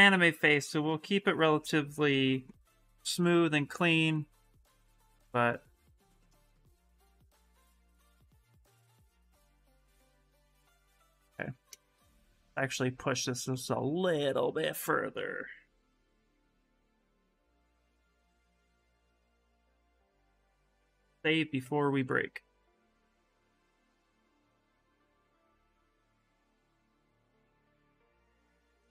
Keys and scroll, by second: 20.7 Return, 21.4 Return, 23.5 s, 24.6 b, 24.9 n, 25.6 s.